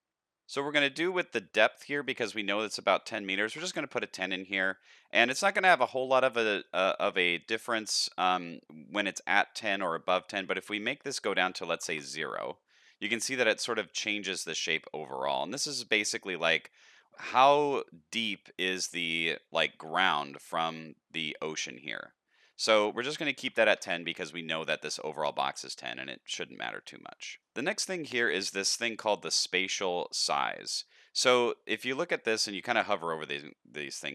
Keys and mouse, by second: 2.0-4.3 drag, 5.5-6.6 middle drag, 9.8 click, 11.0-12.5 drag, 12.9 middle click, 13.6 middle click, 16.0-18.9 shift+drag, 19.3 middle drag, 20.3-20.6 middle drag, 21.4 shift+middle click, 21.7 middle click, 22.7-24.1 drag, 24.5 middle click, 26.6 middle click, 30.9 shift+middle click.